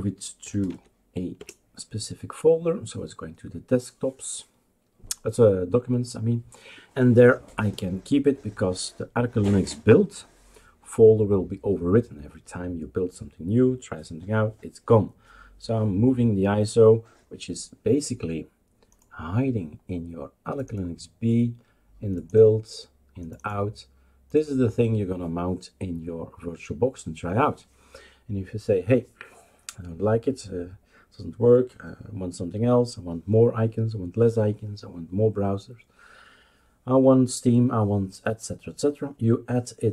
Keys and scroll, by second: 0.0-1.1 typing, 1.4 Return.